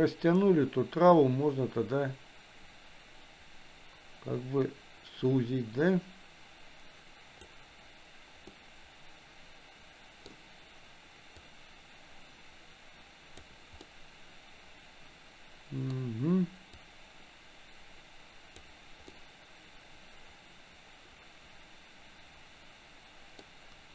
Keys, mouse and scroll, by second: 8.8-10.6 middle drag, 10.6 scroll down 1, 11.9-13.9 drag, 14.2-16.3 middle drag, 17.0-19.2 drag, 19.2-23.9 middle drag.